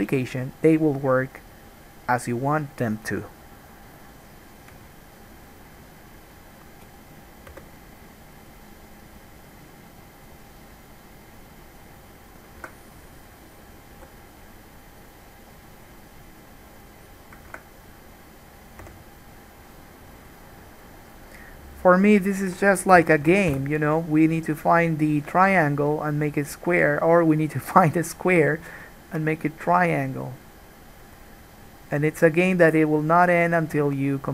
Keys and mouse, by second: 7.7 k, 14.1 k, 19.1 3, 19.9-24.0 right drag, 21.2 click, 21.2 middle click, 21.9 click, 21.9 middle click, 22.4 shift+click, 22.4 shift+middle click, 23.2 f, 23.5 alt+a, 23.7 1, 24.0-32.4 drag, 24.3-32.4 middle drag, 24.3-32.4 right drag.